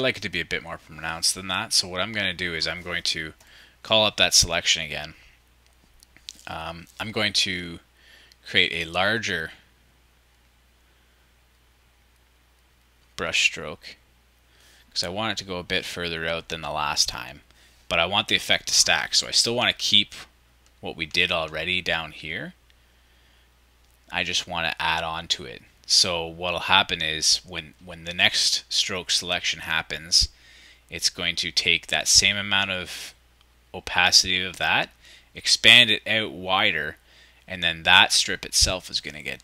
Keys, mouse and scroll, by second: 19.3-20.9 shift+drag, 21.4-23.2 ctrl+drag, 23.5 ctrl+shift+super+click.